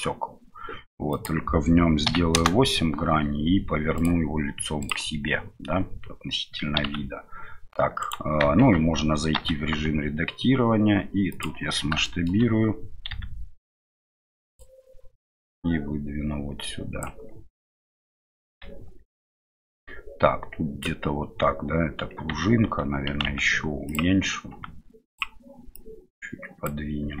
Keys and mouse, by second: 1.1-2.9 right drag, 3.9-5.0 drag, 6.8 s, 8.6 Tab, 12.1 middle click, 15.4-18.7 drag, 18.7 Tab, 20.8-22.1 drag, 22.3 Tab, 25.8-27.2 drag.